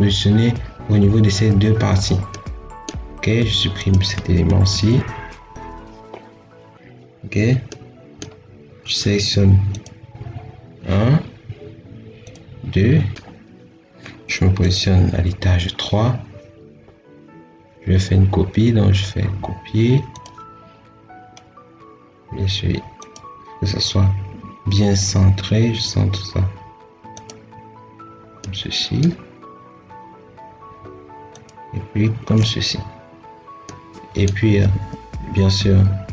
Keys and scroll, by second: 4.6 ctrl+x, 34.3 Escape.